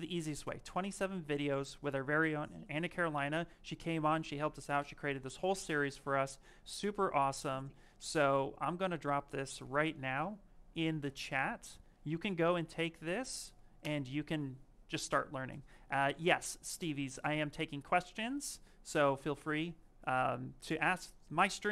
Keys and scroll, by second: 9.5 ctrl+c, 13.7 Return.